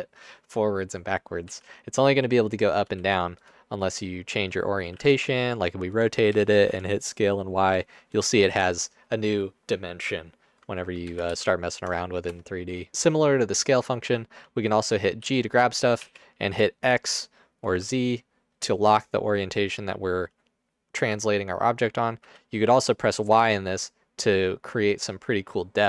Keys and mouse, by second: 1.6 z, 2.8 x, 4.5 x, 4.9 r, 5.1 z, 6.4 s, 6.8 y, 11.2 ctrl+z, 11.4 ctrl+z, 12.4 KP_0, 15.4 g, 16.2 x, 17.7 z, 22.2 y.